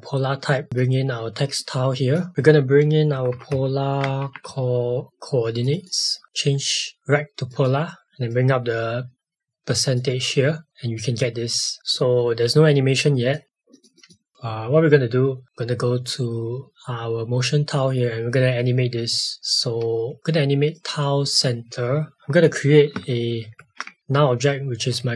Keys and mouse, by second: 3.1-4.5 typing, 5.5 click, 7.0 click, 11.2 click, 13.4 click, 20.7 click.